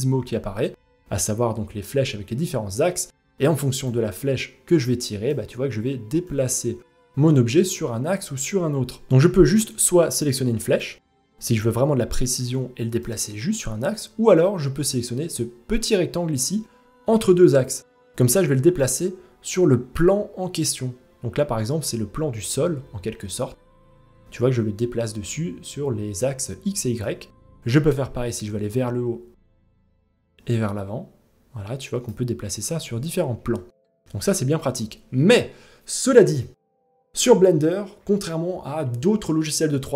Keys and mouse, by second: 1.6 click, 3.4-4.9 drag, 5.9-8.0 drag, 9.2-10.4 drag, 12.0 click, 18.4-26.6 drag, 29.4-31.7 drag, 33.1 ctrl+z.